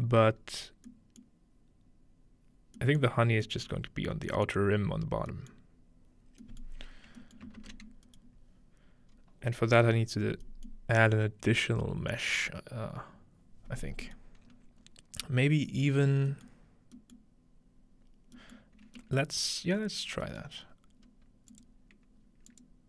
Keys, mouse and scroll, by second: 0.4 middle click, 0.4 scroll up 2, 1.2-2.8 middle drag, 3.1-3.5 middle drag, 4.5-5.3 middle drag, 6.2 middle click, 6.2-9.1 scroll down 3, 7.4 ctrl+middle click, 9.1-9.5 scroll up 3, 10.3-13.7 scroll up 1, 10.7-13.7 middle drag, 13.7-14.4 scroll down 1, 14.2-15.3 middle drag, 14.4-15.6 scroll up 5, 16.7 scroll down 2, 17.2-18.0 scroll down 2, 18.0-19.8 scroll down 1, 20.0-21.1 scroll down 2, 21.1-22.5 scroll up 2, 21.5 click, 22.5 click, 22.5-22.8 scroll up 1.